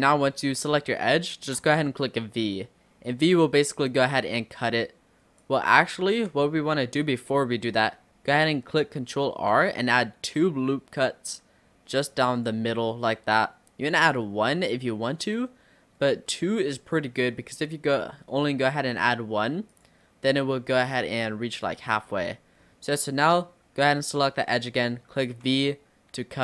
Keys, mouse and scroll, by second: 0.5-0.8 scroll up 2, 1.1-2.3 shift+middle drag, 2.3 v, 5.9 ctrl+z, 6.7 scroll down 2, 7.5-8.1 scroll down 1, 9.6 ctrl+r, 15.1-15.5 scroll up 1, 16.0-16.3 scroll up 2, 16.3 middle click, 16.8-17.4 scroll down 4, 18.0 scroll down 2, 18.3-19.7 middle drag, 19.7 click, 21.6 click, 22.1-23.5 scroll up 7, 25.3 v.